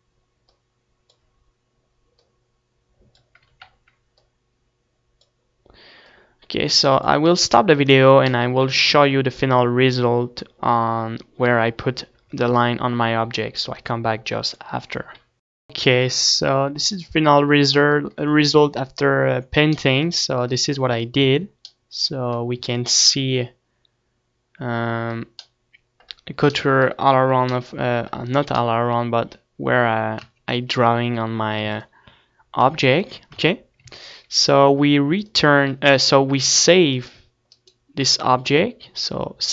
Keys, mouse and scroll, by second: 3.4 ctrl+z, 20.5 ctrl+s, 20.5 Tab, 20.9 Tab, 21.3 Tab, 22.3 ctrl+s, 25.6 middle click, 26.3-30.4 middle drag, 30.4 Tab, 33.5 Tab, 33.5 ctrl+s, 34.5 ctrl+s.